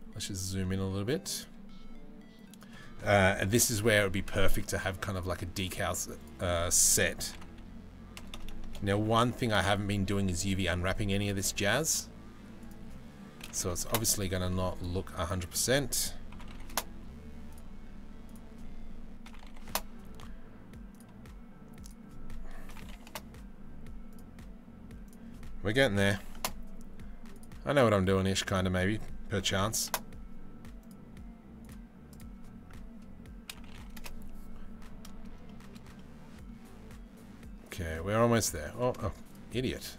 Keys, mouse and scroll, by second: 0.2 middle click, 0.9 click, 2.2-3.8 drag, 4.7 click, 5.8-8.1 drag, 7.9 BackSpace, 8.1 BackSpace, 9.3 click, 12.2-13.6 drag, 15.1-16.4 drag, 17.1 click, 17.8-19.4 drag, 20.5 click, 21.4-22.8 drag, 23.7 click, 24.6-26.1 drag, 28.1-29.6 drag, 31.2 click, 31.7-33.7 drag, 35.5 middle click, 37.2 middle click, 39.7 shift+middle click.